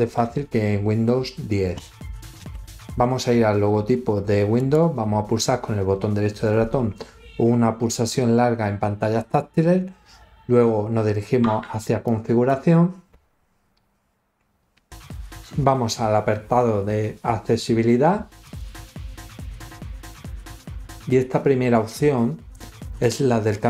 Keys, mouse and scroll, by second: 4.5 right click, 12.0 click, 18.3 click.